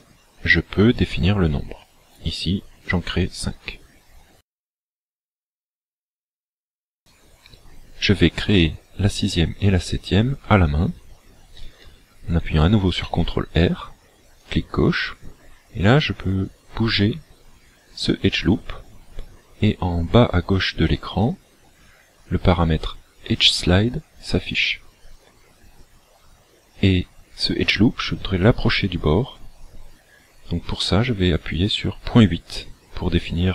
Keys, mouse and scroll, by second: 3.2 click, 5.8 shift+middle click, 6.8-7.2 scroll up 2, 13.0 ctrl+r.